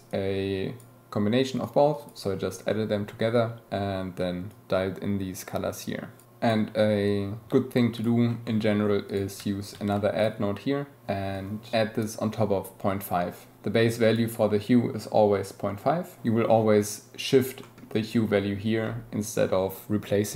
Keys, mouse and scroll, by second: 0.1-0.8 drag, 1.6 click, 4.5-7.9 shift+middle drag, 7.9 scroll up 1, 8.0-8.5 middle drag, 8.5 scroll up 1, 8.6-9.9 middle drag, 16.7-19.1 drag, 19.5 click.